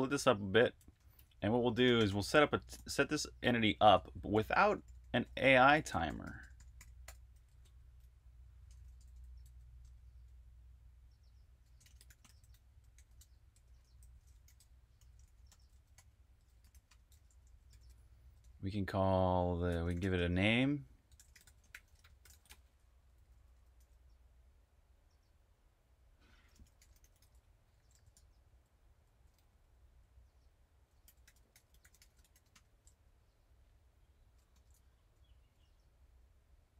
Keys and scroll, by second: 0.0-2.9 typing, 4.2-7.5 typing, 8.6-9.7 typing, 11.5-22.1 typing, 23.6 typing, 26.4-34.4 typing.